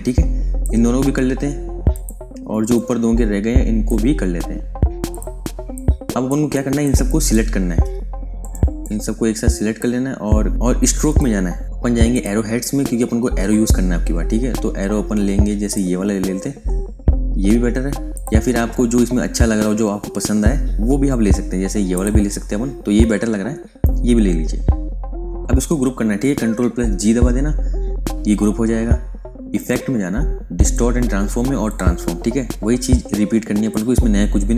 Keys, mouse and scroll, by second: 5.4 space, 5.6 click, 6.1 space, 6.5 ctrl+alt+click, 7.7 v, 8.3 click, 11.0 click, 12.0 click, 13.6-15.1 scroll down 1, 15.6 click, 18.1 click, 19.2-20.2 scroll up 1, 21.8 click, 25.2 click, 26.8 g, 29.5 click.